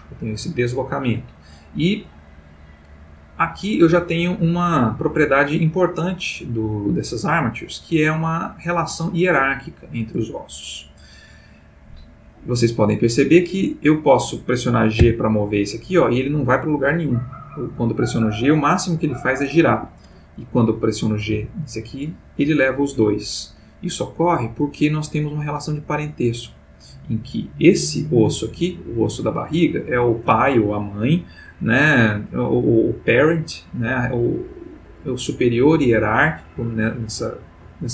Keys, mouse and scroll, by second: 3.0-11.2 drag, 13.3 click, 15.0 g, 19.7 Escape, 20.5 click, 21.3 g, 23.0 Escape, 30.0 click, 31.5 click.